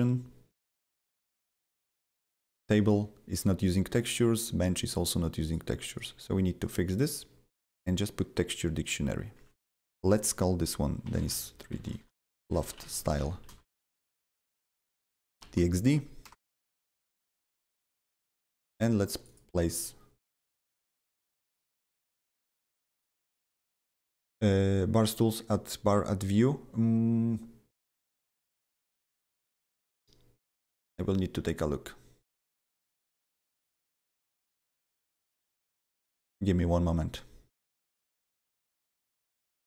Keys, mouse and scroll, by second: 1.1 click, 1.6 click, 1.7 double click, 3.3 click, 3.9 click, 4.0 double click, 5.4 click, 5.8 right click, 5.9 right click, 8.8 click, 10.8-15.9 typing, 16.2 Return, 18.0 click, 18.1 double click, 19.0-19.8 typing, 19.1 click, 19.2 double click, 20.8 click, 38.6 click, 39.2 click, 39.4 double click.